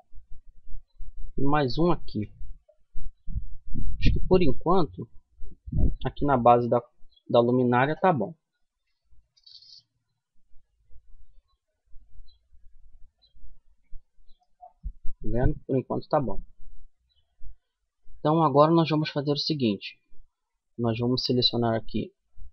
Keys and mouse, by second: 1.2 ctrl+r, 6.7-9.2 middle drag, 8.5 Tab, 10.8-11.9 middle drag, 13.8 Tab, 14.4-16.4 middle drag, 17.4-22.5 middle drag.